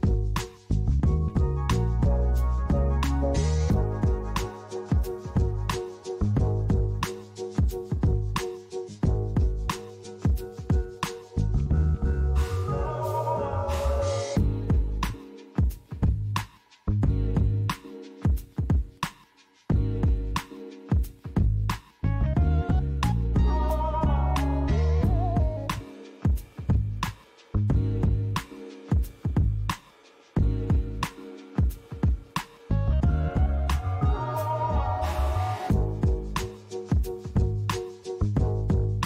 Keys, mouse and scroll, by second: 0.2 click, 1.4 KP_Decimal, 5.1 click, 6.7 click, 16.7 click, 18.5 click, 19.3-20.5 scroll down 4, 20.5-23.0 scroll down 2, 23.0 click, 23.7 click, 26.4-27.2 scroll down 2, 27.2 click, 30.1-31.2 scroll up 3, 31.2 click, 33.1 click, 37.0 click.